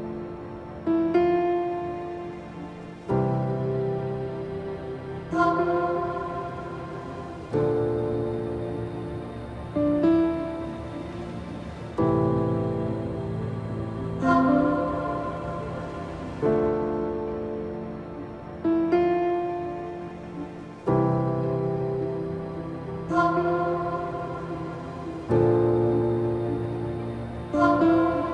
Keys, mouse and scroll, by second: 0.9 scroll up 1, 2.2 right click, 2.9-9.0 drag, 13.1 right click, 14.7 click, 16.9 click, 18.1 ctrl+t, 19.4 right click, 20.7 click, 20.8 click, 21.6-22.1 alt+scroll up 2, 24.3-28.3 drag.